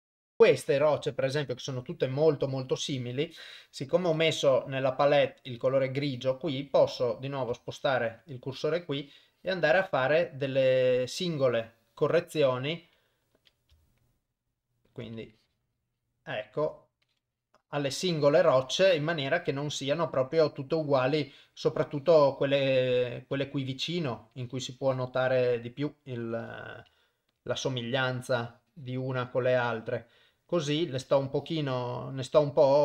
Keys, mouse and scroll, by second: 0.0 click, 4.2 click, 7.8 shift+right click, 8.8 click, 14.6 shift+right click, 15.4 click, 17.1 click, 19.2 click, 19.4 click, 21.6 click, 23.9 shift+right click, 24.4 click, 27.3 shift+right click, 28.3 click, 31.0 click.